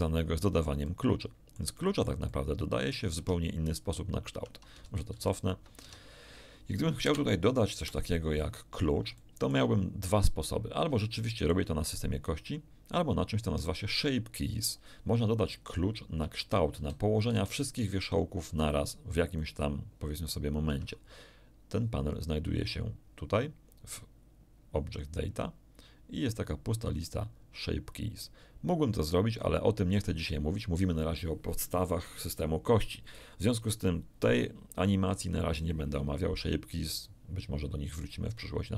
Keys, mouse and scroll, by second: 0.0 middle click, 1.4 middle click, 3.1 Tab, 4.3 Tab, 4.8 ctrl+z, 5.1 ctrl+z, 5.8 Tab, 7.0 KP_0, 7.7 KP_1, 8.7-9.0 scroll down 3, 9.1 shift+middle click, 10.6 scroll up 2, 10.9 shift+middle click, 16.2 Tab, 16.7 a, 17.3 z, 18.4 b, 18.6 click, 20.6 Tab, 22.1 click.